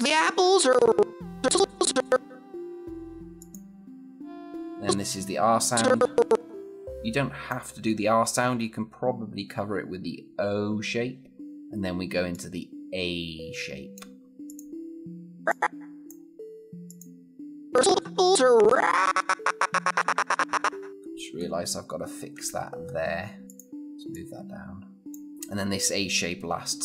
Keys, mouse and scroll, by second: 11.4 click, 17.4 scroll down 1, 17.5-20.9 click, 20.9-22.1 scroll up 1, 22.6-23.4 scroll down 1, 23.4 click, 25.3 scroll up 1.